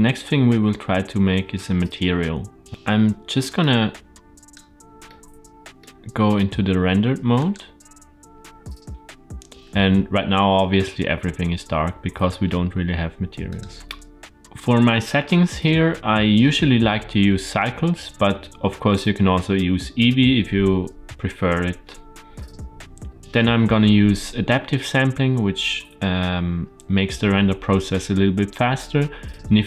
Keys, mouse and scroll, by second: 3.5 click, 5.0-5.7 middle drag, 7.8 click, 13.4 click.